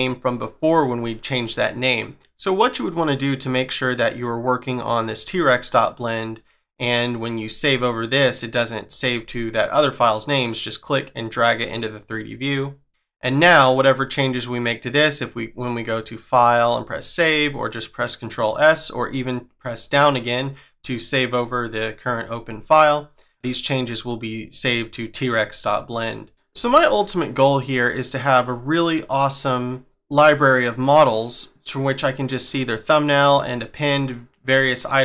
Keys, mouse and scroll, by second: 10.6 click.